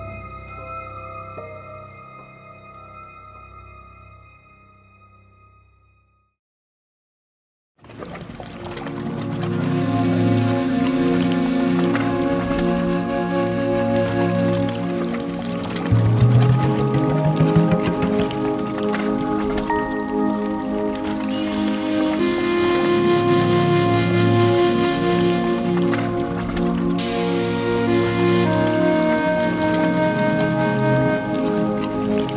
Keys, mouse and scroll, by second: 2.9 click, 4.1 click, 4.7 ctrl+j, 5.3 click, 5.8 middle click, 7.7 scroll, 8.6 click, 9.5 ctrl+j, 10.4 click, 10.8 scroll, 13.0 click, 14.2 click, 15.1 alt+middle click, 16.0 alt+middle click, 17.3 click, 19.4 middle click, 19.5 middle click, 19.5 middle click, 19.9 middle click, 19.9 click, 20.2 middle click, 20.3-20.6 middle click, 20.3 middle click, 20.4 middle click, 20.5 middle click, 20.7 scroll, 22.6 click, 23.3 alt+scroll, 24.0 alt+middle click, 24.1-24.7 scroll, 24.9 click, 25.8 click, 26.6 scroll, 27.8 click, 28.5 click, 28.9 3, 29.0 Return, 31.5 middle click.